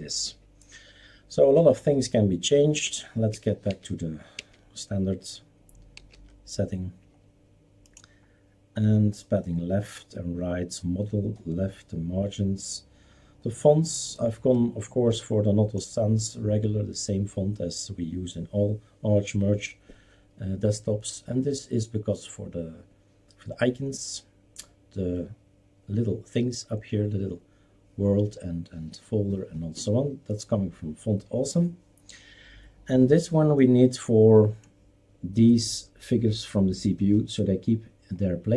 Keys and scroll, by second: 2.8 ctrl+z, 3.3 ctrl+z, 3.7 ctrl+z, 4.3 ctrl+z, 6.0 ctrl+s.